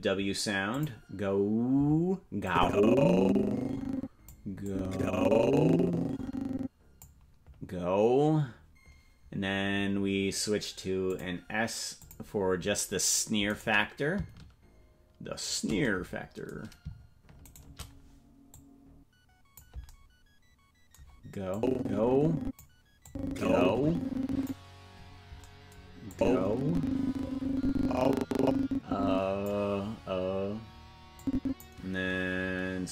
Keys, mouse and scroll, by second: 0.7 click, 2.4-4.3 drag, 4.6-7.0 drag, 11.1 click, 11.9 click, 13.7 right click, 17.6 shift+right click, 18.5-19.6 drag, 21.5-22.6 drag, 23.0-24.5 drag, 26.1-29.5 drag, 31.1 click.